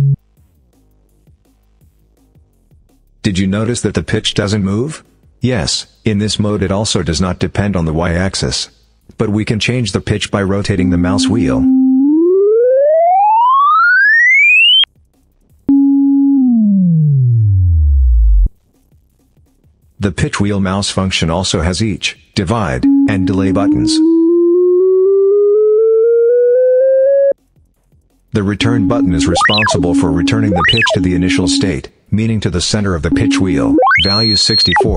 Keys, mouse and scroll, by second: 10.5 click, 11.7-12.1 scroll up 2, 15.4 click, 16.1-16.4 scroll down 2, 21.9 click, 22.6 click, 23.4-23.7 scroll up 2, 27.8 click, 28.4 click, 29.0 scroll up 2, 30.2-30.5 scroll up 2, 32.4 click, 32.9 click, 33.5-33.8 scroll up 2, 34.4 scroll down 2.